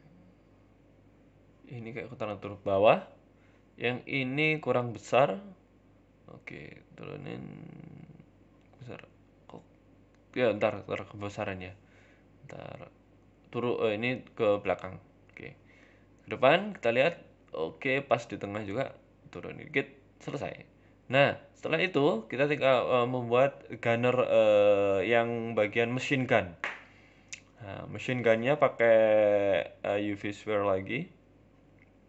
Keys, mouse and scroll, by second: 0.0 Tab, 0.2 click, 1.1 l, 1.6 g, 3.2 right click, 3.7 l, 4.1 s, 6.2 Tab, 6.2 g, 7.0 s, 8.7 middle click, 9.0 middle click, 9.0 scroll down 4, 9.1 middle click, 9.1 scroll up 1, 10.3 s, 10.7 KP_3, 11.0 KP_1, 11.3 scroll up 3, 11.5 s, 12.5 Tab, 12.8 click, 13.2 g, 13.9 Tab, 14.0 scroll down 2, 14.1 middle click, 14.8 Tab, 15.4 KP_3, 16.2 z, 16.7 shift+middle click, 17.1 Tab, 17.4 shift+middle click, 17.8 g, 18.8 middle click, 19.7 middle click, 20.8 shift+middle click, 21.0 shift+middle click, 21.0 z, 21.7 z, 22.1 scroll down 2, 22.5 shift+a, 24.0 middle click, 24.5 KP_3, 24.9 KP_1, 25.5 g, 26.9 s, 27.9 g, 29.2 middle click, 29.9 ctrl+KP_1, 30.3 ctrl+KP_3, 30.7 z, 31.3 shift+middle click, 31.8 g.